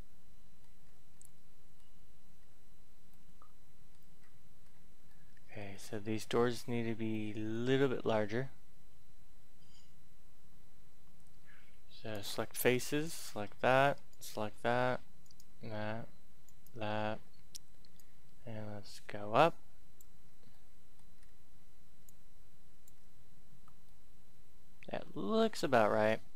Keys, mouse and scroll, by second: 0.8-1.2 scroll up 1, 1.2 middle click, 2.3-3.1 scroll down 1, 3.1 middle click, 4.2-4.6 scroll up 1, 4.6-5.0 scroll down 1, 5.1 middle click, 5.6-6.4 scroll up 1, 6.4 scroll up 1, 7.1 middle click, 12.0 click, 13.0 right click, 14.1 shift+right click, 15.2 shift+right click, 16.4 shift+right click, 16.8-17.9 scroll down 1, 17.9 click, 20.3 scroll down 1, 20.5 middle click, 21.1 scroll up 1, 22.0 click, 23.1-23.5 scroll down 1, 23.8-25.5 middle drag, 25.5-26.0 scroll up 1, 26.0 middle click.